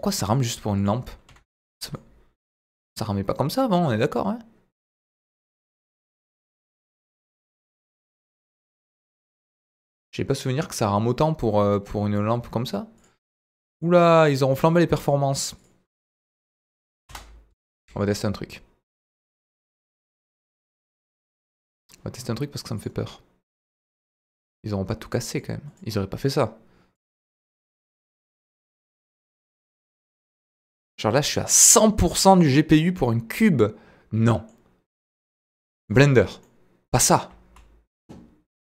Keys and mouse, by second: 0.8 click, 1.3 Delete, 1.9-12.1 middle drag, 13.7 middle click, 19.8-21.5 drag, 22.8 click, 23.4 click, 24.0 click, 25.3 click, 26.9 click, 27.2-34.5 middle drag, 35.5-36.0 middle drag, 36.4-37.3 middle drag, 37.3 z.